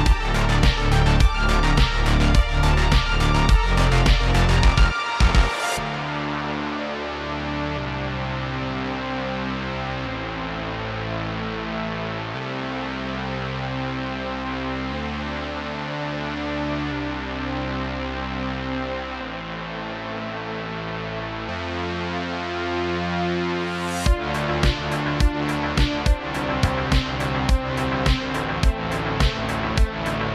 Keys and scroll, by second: 0.0-0.8 typing, 2.8 space, 2.9 space, 4.1 space, 4.1 space, 5.9-9.3 typing, 11.2 space, 11.3 space, 11.4 space, 12.7 space, 14.0-15.1 typing, 18.1-20.3 typing, 21.7 typing, 24.0-25.5 typing, 27.1 space.